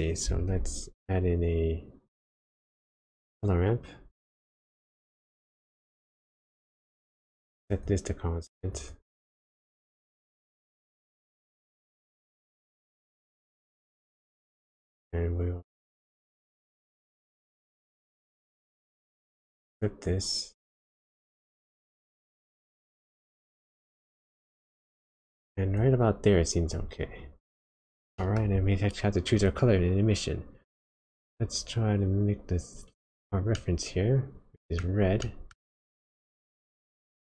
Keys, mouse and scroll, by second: 0.4 shift+a, 5.3 click, 7.7 click, 10.0 middle click, 10.9-12.8 scroll up 1, 12.8 click, 13.9 click, 18.3 click, 21.1 click, 23.0 click, 27.2-27.5 click, 27.8-28.2 scroll down 1, 28.2 middle click, 28.5-29.4 scroll up 1, 29.4 click, 33.5 middle click, 35.2 middle click, 37.0 click.